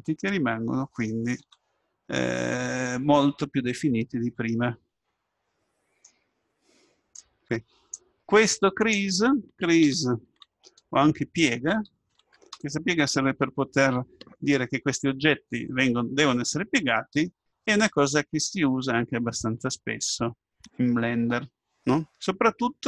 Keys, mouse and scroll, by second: 1.5 Tab, 2.2-4.1 middle drag, 15.9-16.6 scroll up 1, 16.6-18.5 middle drag.